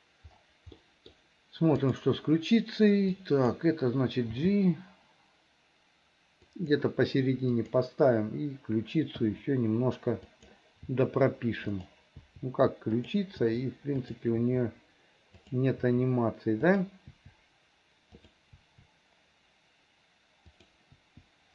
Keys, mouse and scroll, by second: 0.8 middle click, 1.8 click, 3.2 click, 4.3 g, 7.7 click, 9.3 i, 10.4 click, 11.0 i, 11.8 click, 12.3 i, 13.1 click, 13.5 i, 14.1 click, 14.5 i, 15.5 click, 15.9 i, 16.7 click, 17.2 i, 18.3 click, 18.6 i, 20.6 click, 21.0 i.